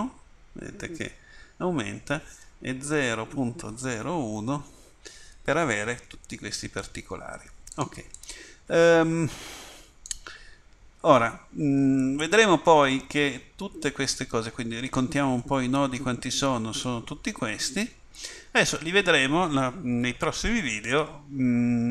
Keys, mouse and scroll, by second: 8.2 click, 8.3 click, 17.6 click, 20.7 click.